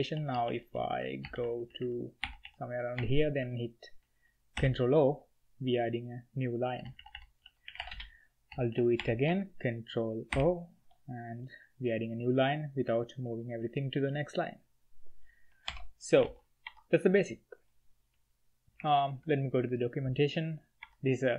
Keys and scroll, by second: 0.0-3.1 typing, 4.5 ctrl+o, 6.7-8.9 typing, 10.3 ctrl+o, 15.6 ctrl+h, 15.9-16.7 typing, 18.8 alt+3, 18.9 alt+3, 20.8 Escape.